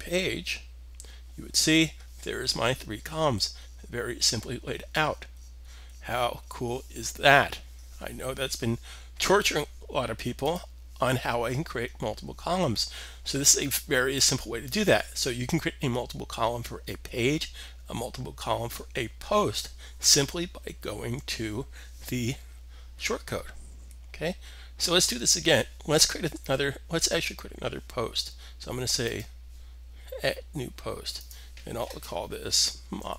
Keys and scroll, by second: 32.4-33.1 typing.